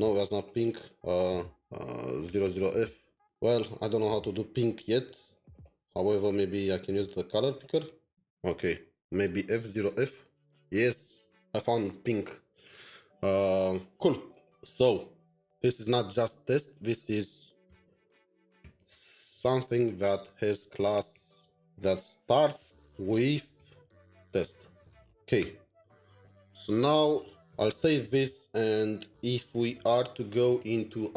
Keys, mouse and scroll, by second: 0.4 typing, 0.4 double click, 2.4 typing, 5.3 double click, 5.5 double click, 8.0-10.0 typing, 17.4-18.1 typing, 20.5-24.0 typing.